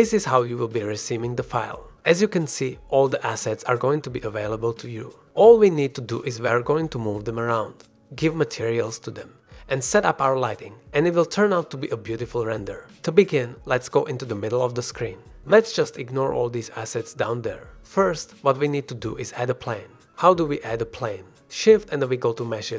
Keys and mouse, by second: 0.6-2.2 middle drag, 4.4-10.2 middle drag, 12.2-12.5 middle drag, 13.1 middle click, 13.9 shift+middle click, 15.1 shift+click, 15.5 shift+drag, 15.9-16.3 shift+drag, 16.3-16.7 drag, 16.8-17.1 shift+drag, 17.2 click, 17.8 shift+drag, 18.1 middle drag, 18.5 shift+middle drag, 18.9 middle drag, 19.8 shift+middle drag, 20.3 middle drag, 22.1 shift+a.